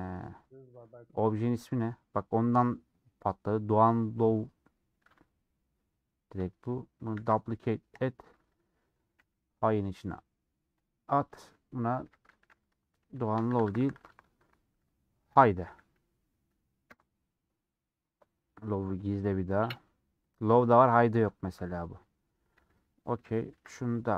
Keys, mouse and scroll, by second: 5.1 g, 11.7 middle click, 12.0 F2, 16.8 BackSpace, 19.0 click, 19.6 middle click, 20.2-21.2 drag, 21.2 KP_Decimal, 22.0 middle click, 22.3 Tab, 22.8 alt+click, 23.1 middle click, 23.4 ctrl+b.